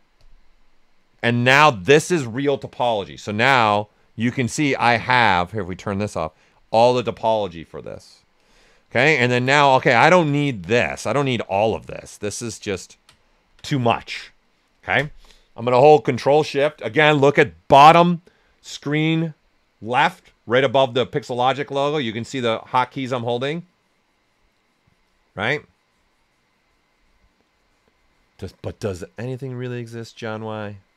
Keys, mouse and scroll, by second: 0.1 click, 3.0 click, 3.1 shift+f, 3.7-5.7 ctrl+right drag, 5.7 click, 8.3 click, 8.9 ctrl+right click, 9.6 right click, 10.2 alt+right click, 11.4 shift+f, 12.0 alt+right click.